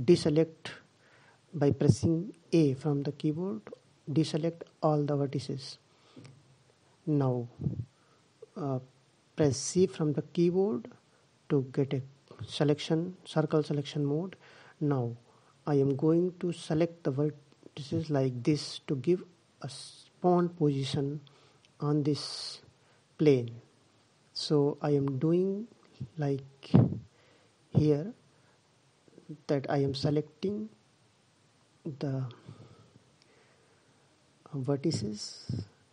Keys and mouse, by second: 1.3 c.